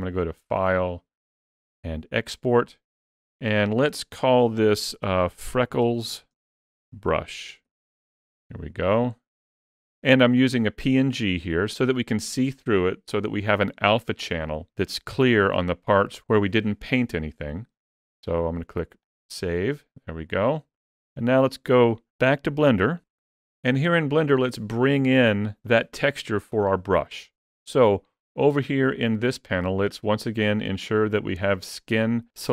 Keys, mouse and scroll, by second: 30.6 click.